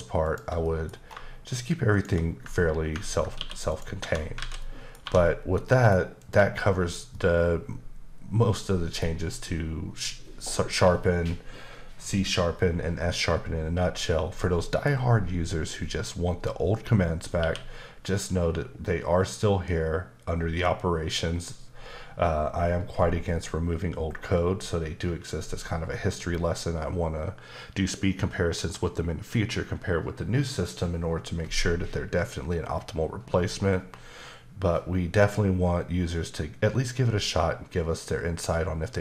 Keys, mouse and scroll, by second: 0.2 shift+click, 0.3 shift+click, 0.6 middle click, 0.9 scroll up 2, 1.9 shift+click, 3.4 q, 3.7 click, 4.0 Tab, 4.1 scroll down 2, 4.4 alt+z, 4.6 middle click, 5.1 1, 5.4 scroll down 2, 5.7 middle click, 6.2 click, 7.1 middle click, 13.6-14.4 scroll up 1, 14.4 middle click, 17.4 q.